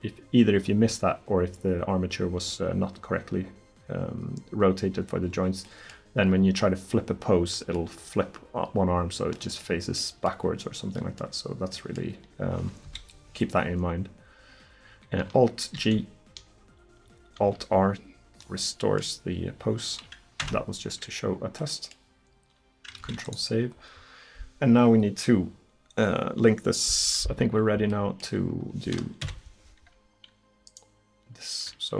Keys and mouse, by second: 12.9 KP_1, 15.8 alt+g, 17.4 alt+r, 20.5 Tab, 23.0 ctrl+s, 27.9-29.3 middle drag, 29.3 KP_1.